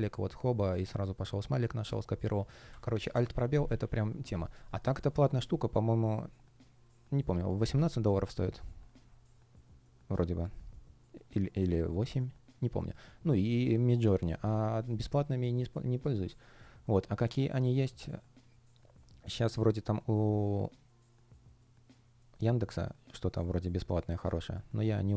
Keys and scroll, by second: 2.6 Escape.